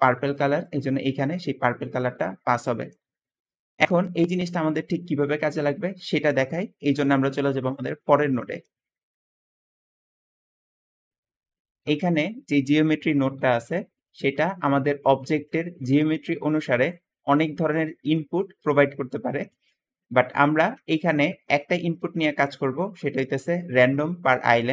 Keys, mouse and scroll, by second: 3.7 Escape, 8.4 middle click, 11.5 g, 12.3 click, 16.5 `, 19.3 Escape, 19.4 Escape, 20.5 g, 21.9 `, 22.0 g, 24.5 Escape, 24.6 Escape.